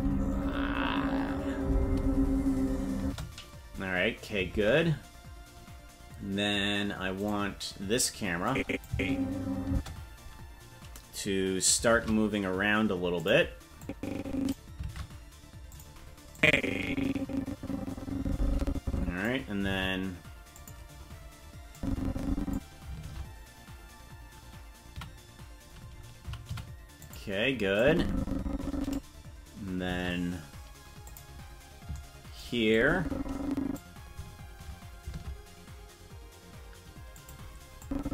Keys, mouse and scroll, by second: 3.0 space, 4.5 ctrl+Tab, 7.2 right click, 8.4 click, 8.8 space, 9.7 space, 11.8 shift+`, 13.8 click, 14.9 shift+`, 16.3-19.2 drag, 19.6 shift+`, 21.7 click, 22.9 shift+`, 27.7-28.9 shift+drag, 29.8 shift+`, 32.7-33.7 drag, 35.0 shift+`, 37.8-38.1 drag.